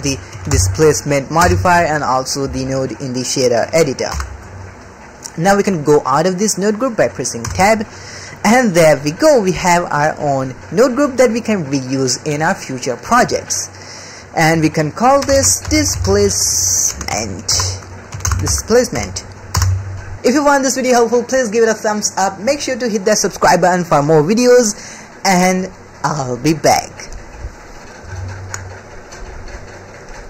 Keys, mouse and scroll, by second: 4.1 n, 4.4 click, 4.8-5.6 middle drag, 7.4 Tab, 7.8 click, 8.5-9.8 drag, 10.3 middle click, 13.5 click, 14.5-19.5 drag.